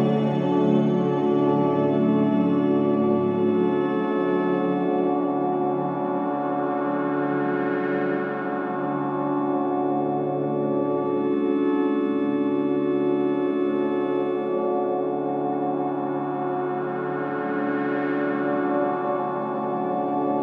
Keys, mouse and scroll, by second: 0.4 click, 2.7 click, 5.6-7.5 drag, 7.5 click, 8.0 scroll up 1, 10.4-11.1 scroll up 1, 11.8 scroll down 1, 14.0-14.9 typing, 14.9-18.1 drag, 19.9-20.4 scroll down 1.